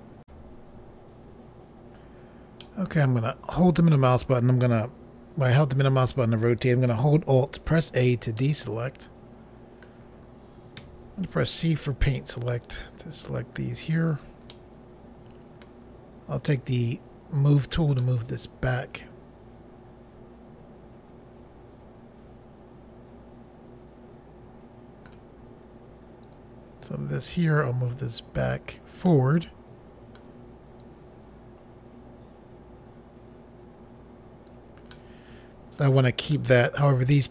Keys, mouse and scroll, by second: 0.2 Pause, 2.6 middle click, 7.7 alt+a, 8.4 middle click, 10.8 c, 12.5 click, 13.2 click, 14.1 right click, 14.5 middle click, 16.5 click, 18.0 middle click, 26.2 click, 27.3 click, 29.1 middle click, 30.8 click, 34.9 middle click, 36.3 middle click.